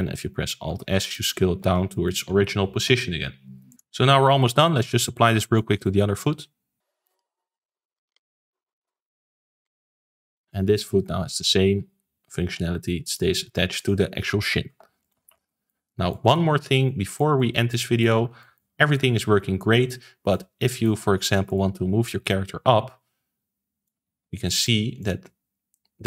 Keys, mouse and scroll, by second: 0.6 alt+s, 1.1-1.6 shift+middle drag, 1.6 ctrl+s, 1.9-3.7 shift+middle drag, 3.7-4.2 scroll up 3, 4.2-7.0 middle drag, 7.0 click, 7.3-8.5 drag, 8.6 click, 9.3 click, 9.9 click, 10.2-10.7 middle drag, 10.7 click, 10.9 r, 12.4 g, 13.3 ctrl+z, 14.3 alt+r, 14.6 alt+g, 15.0 click, 15.2 ctrl+s, 15.3 scroll down 4, 15.6-18.1 middle drag, 18.1 ctrl+s, 18.3-21.4 shift+middle drag, 21.4 click, 22.2 click, 24.2 ctrl+z, 24.4 middle click, 24.9 click.